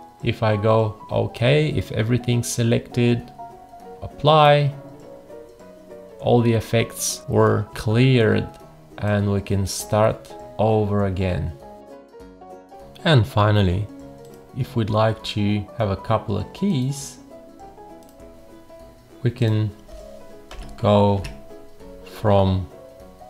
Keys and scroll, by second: 7.7 F1, 20.5 0, 21.2 Return.